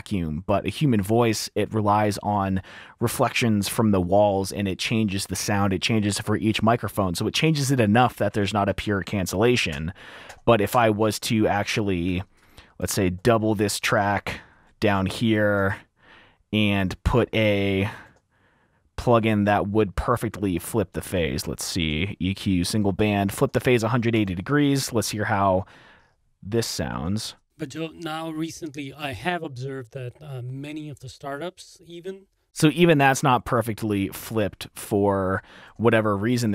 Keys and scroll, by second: 9.8 typing, 10.8-11.4 typing, 12.5 r, 12.8 super+4, 15.1 super+z, 24.4 F7, 24.7 t, 27.7 space, 28.2 F7, 32.4 F7, 32.4 r, 33.6 space, 35.9 t.